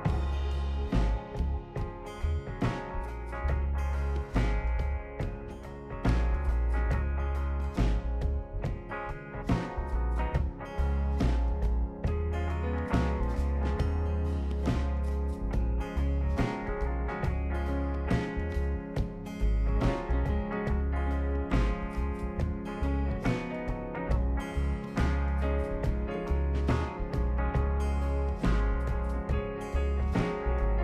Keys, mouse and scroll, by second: 0.2 scroll up 1, 4.2 click, 4.6 scroll up 1, 6.5 click, 8.3 click, 9.7 click, 10.8 click, 11.1 right click, 12.4 click, 13.3 click, 13.6 scroll down 1, 14.3-14.9 right drag, 16.7 scroll up 2, 20.5 click, 21.8 click, 23.4 click, 23.8 right click, 24.3 right click, 24.6 scroll down 2, 25.1 scroll up 2, 27.1 click, 28.0 ctrl+click, 28.8 ctrl+click, 29.5 ctrl+click, 30.6 ctrl+click.